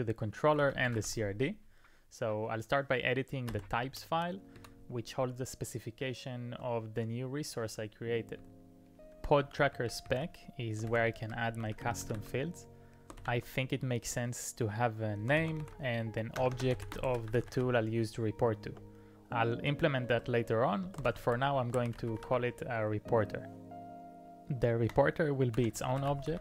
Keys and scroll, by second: 0.4-1.5 typing, 3.5 Return, 3.5 typing, 4.6 ctrl+d, 8.4 j, 8.7 j, 10.7-13.2 typing, 15.2-22.8 typing, 24.9-26.4 typing.